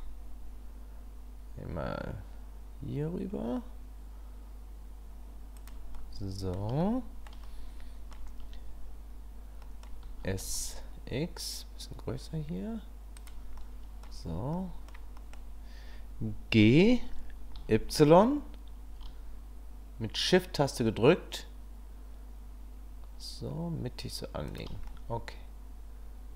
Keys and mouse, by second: 5.9-6.5 middle drag, 6.9-7.3 shift+middle drag, 7.6 middle click, 9.7 middle click, 10.0 s, 13.6-14.0 middle drag, 14.5 middle click, 16.5 g, 24.9-26.3 middle drag.